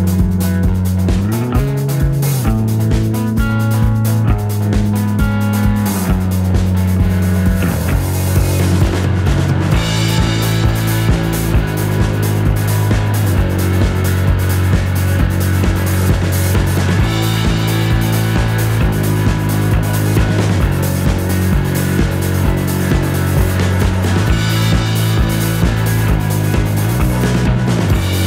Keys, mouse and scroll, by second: 4.1 KP_Subtract, 5.1 click, 5.8 KP_Add, 6.7 click, 9.2-11.1 shift+drag, 11.4 shift+click, 12.6 KP_Add, 13.3 click, 14.8-18.6 drag, 23.0 click, 24.4 KP_Add, 26.1 click, 27.8-28.2 shift+drag.